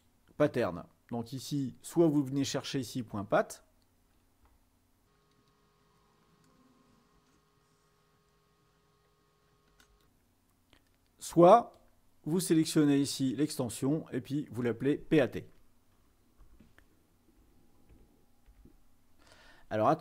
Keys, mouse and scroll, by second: 2.6-7.3 scroll down 2, 7.3-9.1 scroll up 4, 9.3 scroll down 2, 9.5-9.9 scroll up 2, 10.0 click, 11.9-15.8 drag, 16.5 BackSpace, 18.1-18.5 typing.